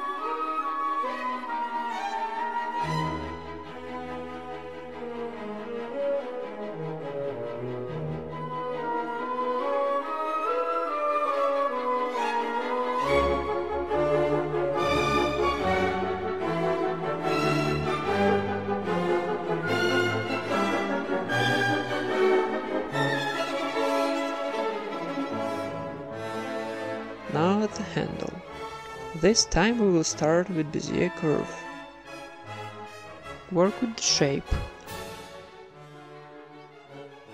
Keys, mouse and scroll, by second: 0.1 middle click, 0.3 z, 0.6 ctrl+Tab, 0.9-1.9 right drag, 1.3 ctrl+KP_Add, 2.0 e, 2.3 s, 4.1 e, 4.5 g, 5.2 s, 6.1 Tab, 6.4 middle click, 6.7 Tab, 7.6 a, 7.8 right click, 8.0 s, 8.9 Tab, 9.4 Tab, 10.0 right click, 10.3 ctrl+KP_Add, 10.4 ctrl+KP_Add, 10.7 ctrl+KP_Add, 10.8 ctrl+KP_Add, 11.3 s, 12.5 KP_1, 13.0 z, 14.5 s, 15.2 Tab, 15.3 z, 15.5 middle click, 16.3 Tab, 16.8 ctrl+r, 17.6 Tab, 18.2 Tab, 18.6 ctrl+r, 19.6 ctrl+r, 19.9 alt+s, 20.6 Tab, 20.7 middle click, 22.2 Tab, 22.6 a, 22.7-23.8 right drag, 23.1 g, 24.1 Tab, 24.7 KP_1, 25.5 ctrl+s, 25.8 a, 26.1 ctrl+s, 26.3 z, 27.0 click, 27.4 shift+a, 29.1 Tab, 29.5 r, 30.5 r, 31.1 middle click, 31.7 right click, 31.9 r, 32.3 g, 33.1 right click, 33.2 r, 33.6 g, 34.1-35.5 right drag, 34.7-37.3 typing, 35.9-37.3 right drag.